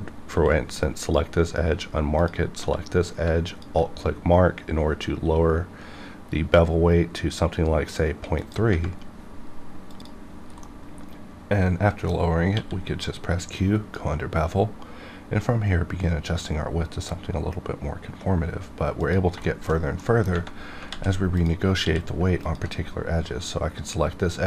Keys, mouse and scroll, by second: 0.3 q, 0.8-2.2 drag, 2.6 q, 3.5 alt+click, 8.4 click, 13.5-16.4 drag, 18.9 click, 19.4 shift+middle click, 19.9 middle click, 20.8 alt+z, 21.3 click, 21.8 q, 22.4 alt+click.